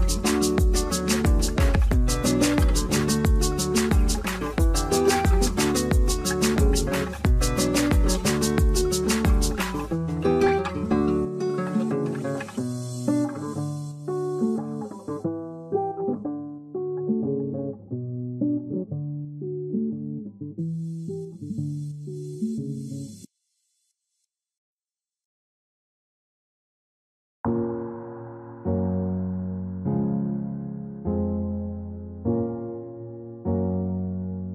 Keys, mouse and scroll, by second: 0.9 scroll up 1, 4.4-4.9 scroll down 2, 4.4 middle click, 8.3 double click, 9.2 1, 9.3 Tab, 9.3 1, 9.4 Tab, 9.5 1, 10.5-11.0 scroll down 1, 11.7 alt+middle click, 11.7 scroll up 1, 11.8 scroll down 1, 13.5 alt+middle click, 13.5 z, 14.2 alt+middle click, 15.4 F3, 16.3 right click, 20.8 ctrl+a, 21.3 alt+middle click, 21.8 right click, 23.1 F3, 23.5 scroll, 23.6 alt+middle click, 24.6 scroll, 26.1 scroll up 1, 29.6-31.2 scroll up 1, 31.3 q, 32.4-34.0 scroll up 1.